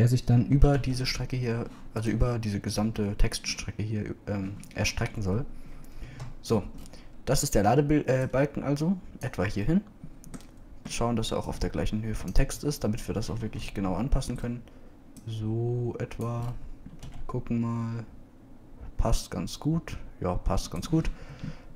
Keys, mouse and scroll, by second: 1.6 s, 7.1 KP_Decimal, 13.4 KP_0, 14.7 KP_Decimal, 18.1 b.